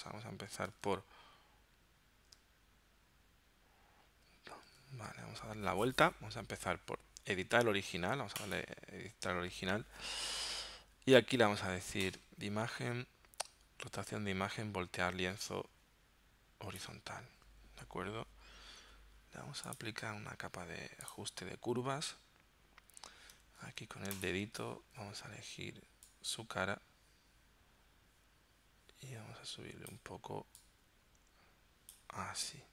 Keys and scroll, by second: 0.8 super+Tab, 4.7 super+Tab.